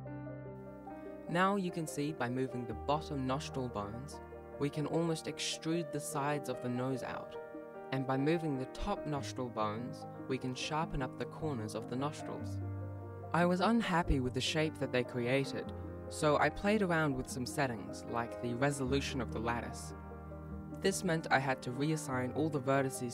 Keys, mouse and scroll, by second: 0.1 right click, 0.3 ctrl+Tab, 0.4 right click, 1.1 ctrl+z, 1.3 right click, 1.7 ctrl+s, 1.7 ctrl+Tab, 1.7 click, 2.4 right click, 2.6 ctrl+Tab, 3.0 right click, 3.8 ctrl+z, 4.1 right click, 5.4 ctrl+z, 6.1 right click, 6.7 ctrl+z, 7.0 right click, 8.4 right click, 9.8 scroll down 1, 10.4 scroll down 1, 10.9 ctrl+s, 11.2 scroll down 1, 11.6 shift+middle click, 12.2 alt+a, 12.9 right click, 13.1 shift+right click, 13.8 alt+g, 14.2 ctrl+s, 15.5 ctrl+Tab, 16.2 right click, 16.5 right click, 16.8 right click, 17.8 ctrl+Tab, 18.0 right click, 19.5 click.